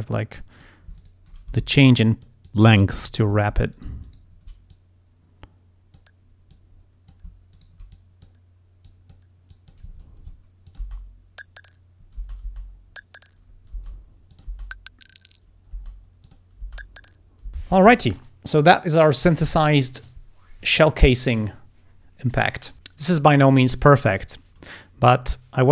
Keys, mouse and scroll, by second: 0.4 click, 1.0 shift+right click, 1.6 shift+d, 2.0 shift+click, 2.5 click, 3.1 ctrl+scroll down 2, 3.8 ctrl+shift+right click, 4.1 shift+right click, 4.8-6.2 shift+drag, 6.6 click, 7.6 shift+right click, 8.0 shift+click, 8.9 click, 9.6 click, 10.0 ctrl+scroll down 2, 10.7 ctrl+click, 10.9 ctrl+space, 12.3 space, 13.8 space, 14.4 click, 14.6 space, 15.8 space, 16.3 click, 16.7 space.